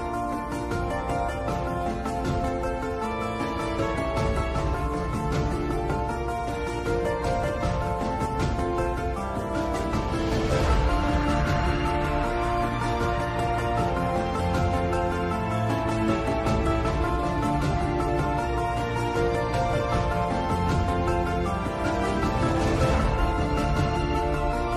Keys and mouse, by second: 0.3 click, 1.7 shift+click, 5.3 shift+click, 7.4 ctrl+l, 11.0 middle click, 12.3 KP_7, 20.3-22.2 drag.